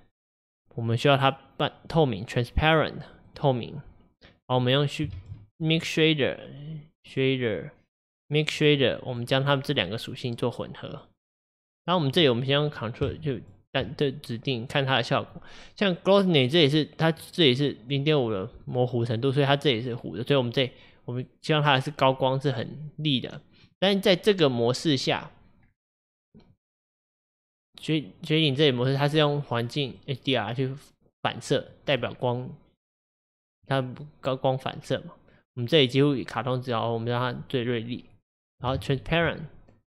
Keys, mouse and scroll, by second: 4.7 click, 9.8 drag, 16.4-18.3 middle drag, 18.3-18.7 scroll up 2, 18.7-20.6 middle drag, 20.6-25.6 drag, 25.6-26.6 scroll down 2, 26.6-28.8 middle drag, 28.8-30.0 scroll up 2, 30.0-34.1 middle drag, 34.1-37.0 drag, 39.1 ctrl+shift+click.